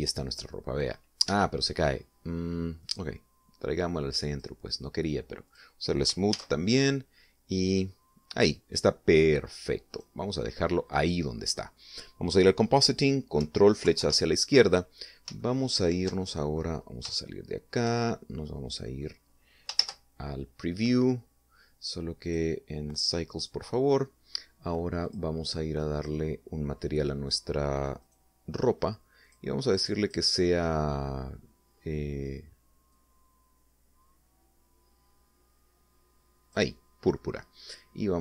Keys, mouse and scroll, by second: 2.2 Escape, 3.8-5.5 drag, 6.4 click, 7.2 alt+a, 10.8 click, 14.8 ctrl+Left, 16.3-17.6 shift+middle drag, 17.7 shift+scroll up 2, 18.1 shift+middle click, 19.4 middle click, 20.7 shift+z, 23.2 click, 23.8 click, 26.0 click, 26.9 click, 29.0 right click, 30.2 click, 30.7 click, 33.8-37.6 drag.